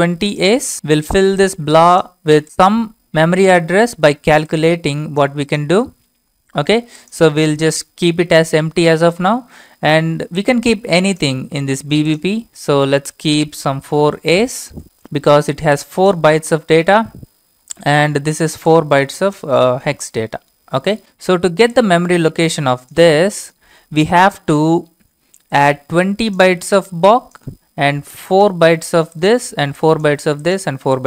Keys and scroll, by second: 0.7 typing, 3.2 typing, 13.6-14.6 typing.